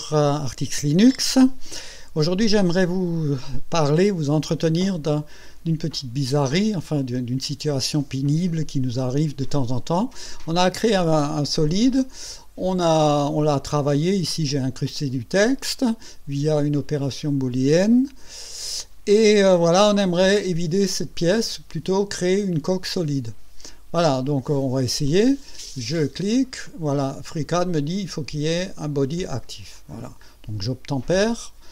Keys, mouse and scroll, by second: 5.0-9.1 drag, 9.5-10.3 drag, 11.2-12.3 drag, 19.5-20.5 drag, 21.3 right click, 25.1 click, 26.6 click, 29.7 click.